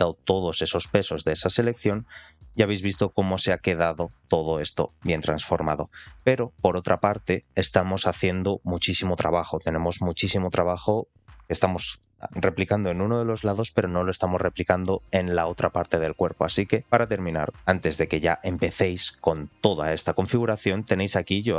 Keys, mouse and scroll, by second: 1.7 shift+middle click, 4.9 middle click, 17.6 middle click, 17.6 scroll down 2, 21.4-21.5 middle drag.